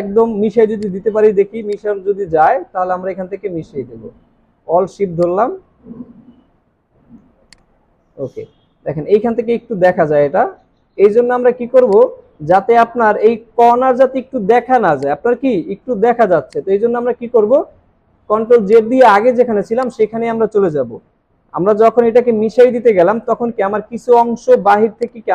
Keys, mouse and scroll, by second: 0.5 alt+scroll down 2, 3.4 scroll down 1, 9.6 alt+scroll up 1, 11.8 alt+scroll down 1, 12.5-12.9 alt+scroll up 3, 14.9 alt+scroll up 1, 15.4 space, 15.8 alt+scroll down 3, 18.0 ctrl+z, 19.5 alt+scroll down 1, 20.1 alt+scroll down 1, 20.2 space.